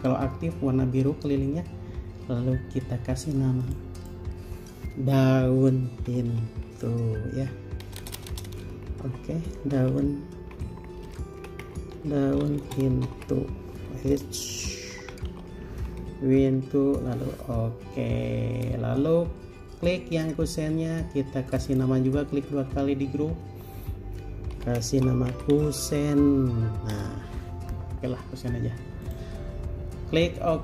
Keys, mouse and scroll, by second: 4.2 double click, 6.1-6.7 typing, 8.0-8.5 typing, 9.7 typing, 11.1-13.3 typing, 14.3-15.6 typing, 16.8 Return, 21.9 double click, 24.7-25.9 typing.